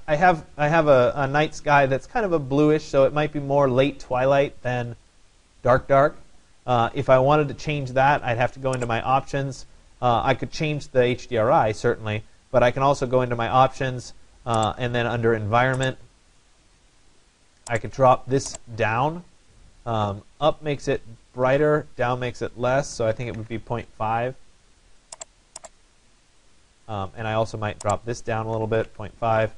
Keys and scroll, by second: 22.8 0, 23.1 Delete, 23.4 5, 28.2 0, 28.7 Delete, 28.9 5.